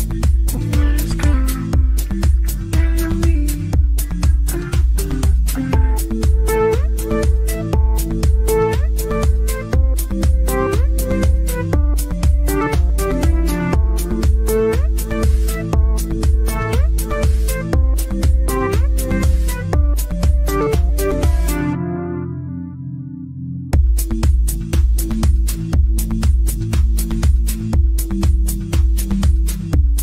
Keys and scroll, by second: 15.8 ctrl+z, 26.6 KP_Add.